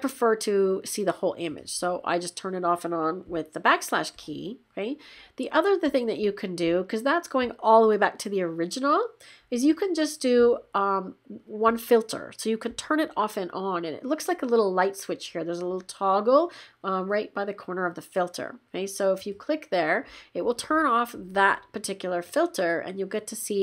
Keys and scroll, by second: 3.2 \.